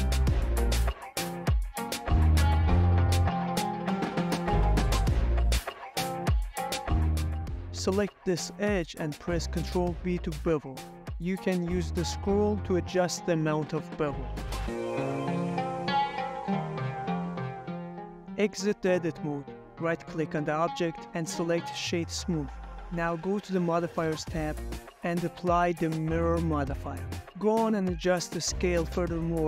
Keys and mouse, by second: 0.1 middle click, 1.0 e, 1.5 x, 1.8 y, 4.1 click, 4.5 middle click, 5.2 g, 5.4 z, 6.7 click, 6.9-8.6 middle drag, 8.6 Tab, 8.6 Tab, 8.9 click, 9.3 middle click, 9.6 ctrl+b, 19.2 middle click, 20.3 Tab, 20.6-21.5 right drag, 21.6-21.9 middle drag, 22.1 ctrl+middle click, 22.4-24.7 middle drag, 26.2 ctrl+a, 26.4-26.8 middle drag, 27.2 s, 27.6 z, 27.9 Escape, 27.9 drag, 28.2 s, 28.4 z, 28.5-29.1 drag, 29.1-29.4 middle drag.